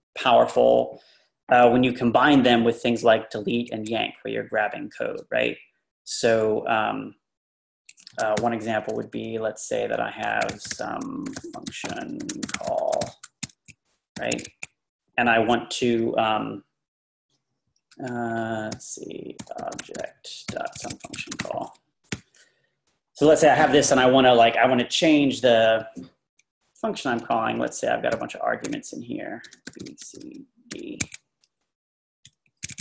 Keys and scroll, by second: 0.5 Left, 1.8-3.0 Left, 8.4 o, 10.2-14.8 typing, 18.0 Tab, 18.1 Left, 18.7-22.2 typing, 26.0 Tab, 26.6-32.8 typing.